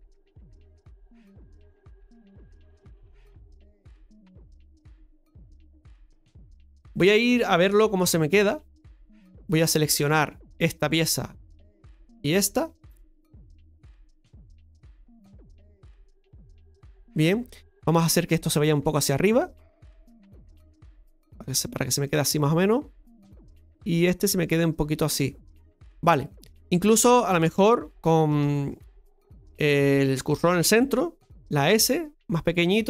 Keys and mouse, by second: 8.0 KP_Divide, 10.1 Tab, 10.4 right click, 12.1 right click, 13.2 KP_Divide, 14.2-15.9 middle drag, 16.0 middle click, 18.7-22.0 drag, 22.0-26.2 middle drag, 26.3 shift+middle click.